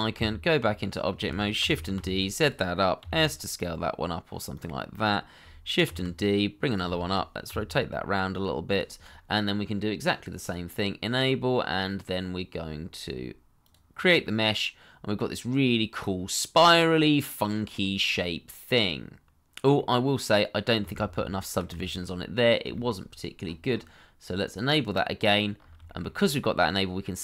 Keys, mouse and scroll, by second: 0.1 Tab, 1.6 shift+d, 1.9 z, 3.0 s, 5.8 shift+d, 6.9 shift+middle click, 7.4 r, 9.1 scroll down 1, 12.6 scroll down 1, 14.2 middle click, 16.4 scroll up 1, 16.6 middle click, 21.0 ctrl+z, 21.8 shift+middle click, 22.3 scroll down 1, 22.7 shift+middle click, 23.4-23.7 scroll up 1, 25.2 middle click, 25.5 scroll up 1, 25.8 shift+middle click, 26.2 middle click.